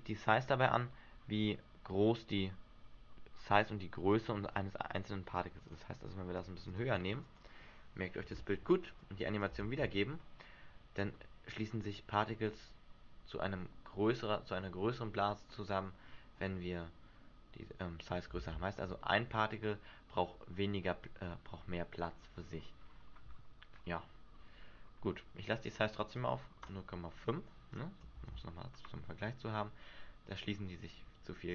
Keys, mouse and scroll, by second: 5.8 click, 6.5 click, 6.8 click, 7.4 click, 9.2 click, 9.8 alt+a, 15.9 middle click, 18.5 alt+a, 19.1 shift+middle click, 19.5-20.1 scroll up 3, 20.1 scroll up 1, 23.0-23.5 scroll down 5, 23.4-24.6 scroll up 3, 25.9 click, 26.1 click, 26.8 click, 27.9 click, 28.3 alt+a.